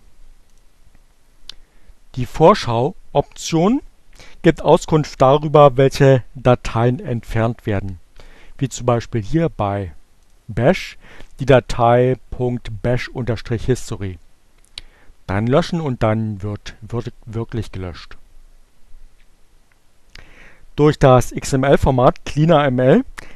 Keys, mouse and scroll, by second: 6.6 click, 7.3 click, 8.3 click.